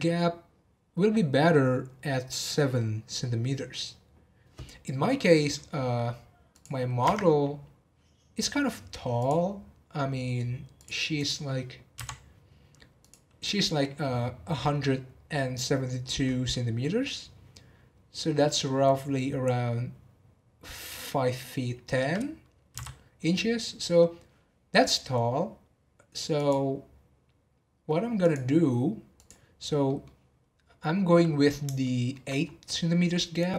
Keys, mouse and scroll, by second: 6.5 click, 7.0 Tab, 7.7 scroll down 5, 9.2 click, 9.4 scroll down 1, 10.7 click, 11.2 click, 11.9 n, 12.9 click, 26.3 click, 28.2 click, 29.1 click, 29.8-32.4 middle drag, 32.4-32.8 scroll up 2, 32.8-33.5 middle drag.